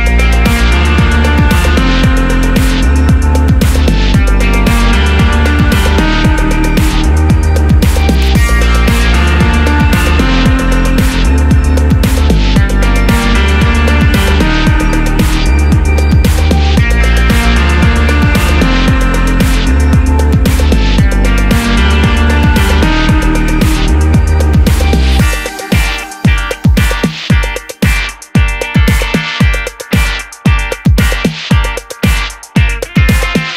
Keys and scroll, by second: 9.0 super+c, 9.1 super+v, 28.8 super+a.